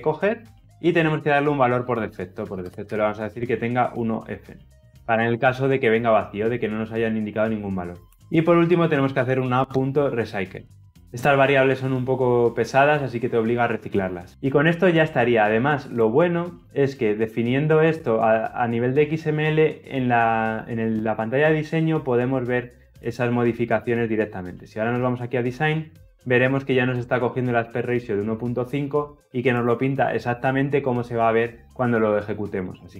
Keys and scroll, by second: 10.7 Return, 16.4 ctrl+F9.